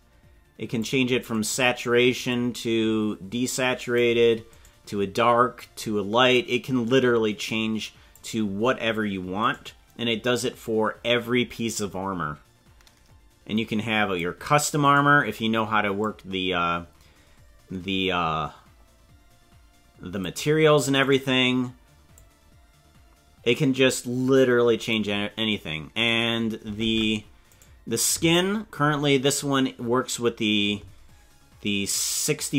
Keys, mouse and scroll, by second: 1.5 right click, 2.3-4.2 drag, 4.7 right click, 5.5-8.2 drag, 9.5 right click, 10.6-14.3 drag, 14.9 right click, 16.0-20.3 drag, 21.1 right click, 22.1-25.1 drag, 26.0 right click, 26.8 ctrl+Tab, 27.5 right click, 28.7-29.3 scroll down 3.